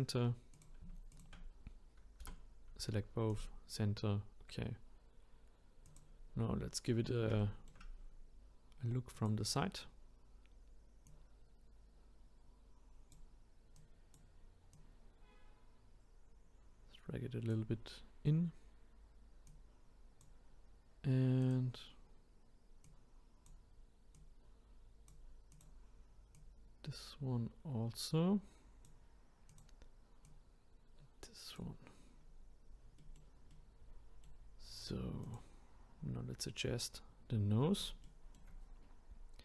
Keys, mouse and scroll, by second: 0.6 click, 2.2 m, 5.8 click, 7.4-9.1 shift+middle drag, 9.1-11.2 drag, 13.7-14.8 drag, 19.5 click, 21.4 click, 22.8-24.3 drag, 25.5 click, 26.3-29.3 drag, 29.5 click, 30.2-31.3 drag, 33.0-35.2 middle drag, 35.2 click, 37.2-38.1 scroll up 1, 38.1 shift+middle click, 38.6-39.4 scroll up 1.